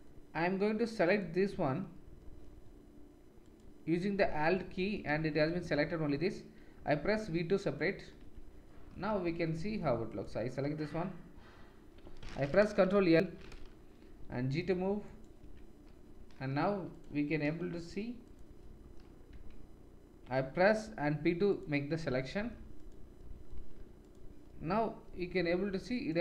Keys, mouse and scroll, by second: 5.1 shift+z, 6.7 v, 7.8-8.9 middle drag, 8.2 Tab, 9.0 shift+z, 10.1 click, 10.9 Tab, 12.9 ctrl+l, 14.1 g, 15.5 Tab, 19.3 Tab, 20.8 p, 22.0 Tab, 22.8 click, 24.0 click, 25.1 g.